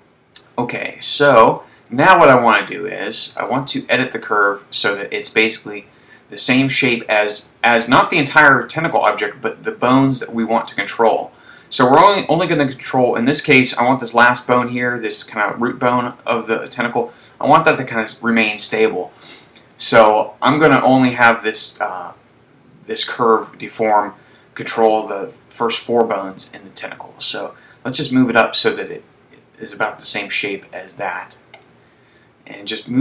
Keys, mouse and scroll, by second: 0.2 Tab, 1.2 shift+middle click, 3.6 right click, 7.1 click, 19.3 shift+middle click, 27.5 click, 31.6 right click.